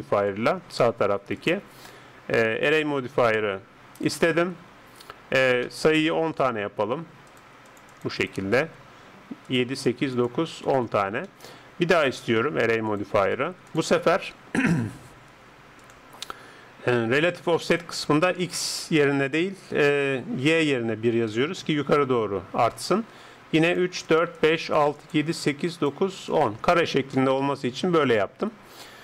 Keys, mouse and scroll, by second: 1.4-4.1 drag, 6.1-15.8 middle drag, 7.3-28.8 drag, 27.1 middle click, 28.8-29.0 middle drag.